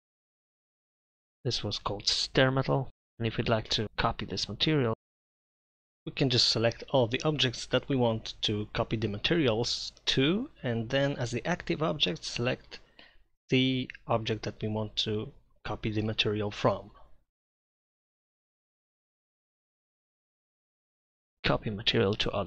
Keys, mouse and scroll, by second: 0.2-4.9 middle drag, 6.5 ctrl+], 7.5 ctrl+], 7.8 ctrl+[, 15.1 z, 16.0 ctrl+], 18.8 shift+].